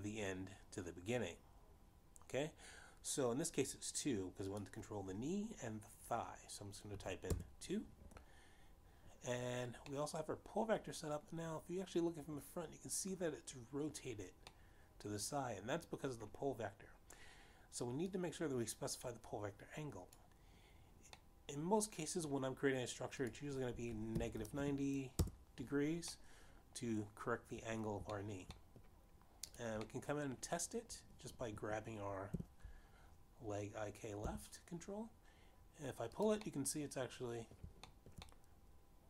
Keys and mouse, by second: 8.8 2, 9.1 Return, 11.9 middle click, 16.4 middle click, 20.7 click, 23.1 middle click, 25.7 click, 25.7 -, 26.2 9, 26.5 0, 26.7 Return, 28.1 middle click, 30.1 shift+middle click, 30.5 middle click, 31.2 click, 31.8 middle click, 34.1 g, 35.0 z, 38.0 click, 38.4 middle click.